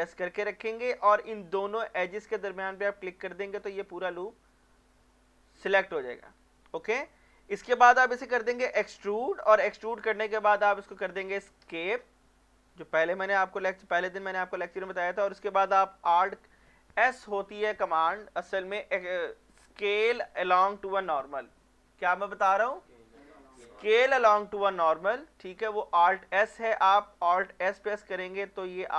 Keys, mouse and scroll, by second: 3.5 scroll down 1, 3.9 middle click, 6.2 scroll up 1, 6.7 middle click, 7.1-8.9 shift+middle drag, 8.9 e, 11.6 Escape, 15.0 middle click, 27.6 alt+s.